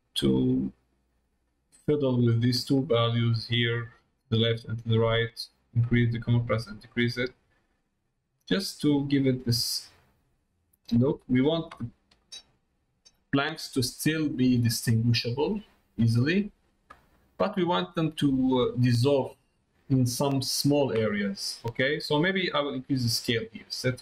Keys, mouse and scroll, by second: 2.6-4.5 drag, 5.3-8.5 drag, 9.1-11.3 drag, 12.1 middle click, 13.8 middle click, 14.9 middle click, 15.7 middle click, 17.0 middle click, 18.4 middle click, 20.1 middle click, 21.6 middle click, 22.3 middle click, 23.4-24.0 drag.